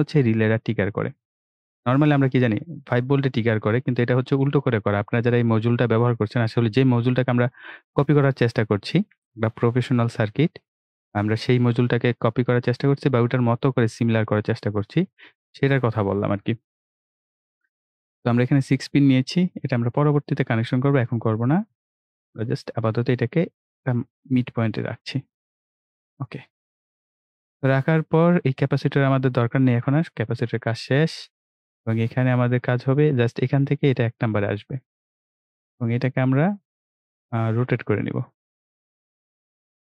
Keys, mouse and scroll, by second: 6.0-17.6 drag, 19.0-20.2 drag, 20.2-20.7 ctrl+scroll down 1, 21.4-22.2 ctrl+scroll up 1, 22.2 ctrl+right click, 23.6-25.2 drag, 25.7-26.8 scroll up 1, 28.6 click, 30.3 Delete, 35.4-39.9 drag.